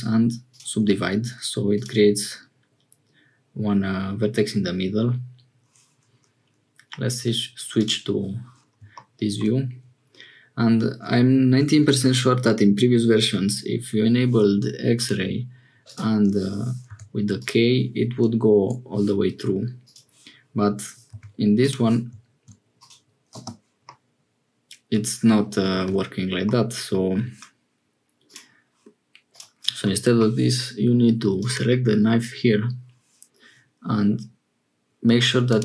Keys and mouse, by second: 1.1 1, 1.7-4.1 drag, 15.0 click, 19.8 click, 23.8-25.0 middle drag, 25.7 ctrl+z, 26.4 middle click, 28.2 click, 31.3 click, 35.4 click.